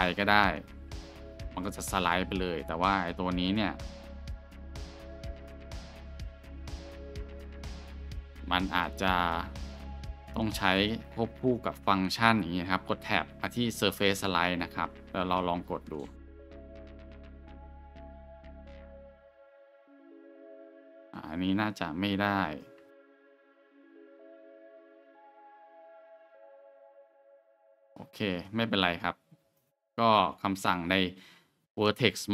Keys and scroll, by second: 1.0 alt+shift+1, 12.8 Tab, 15.7 alt+shift+1, 19.4 g, 22.8 Tab.